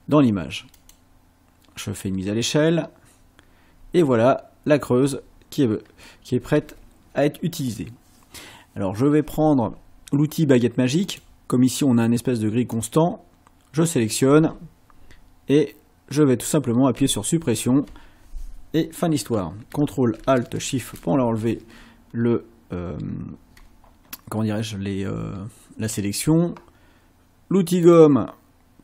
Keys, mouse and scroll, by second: 0.8 click, 4.3 ctrl+scroll up 2, 11.1 click, 12.7 click, 17.0 Delete, 20.7 ctrl+shift+a, 22.1 ctrl+scroll up 2, 23.0 ctrl+scroll down 2, 27.9 click.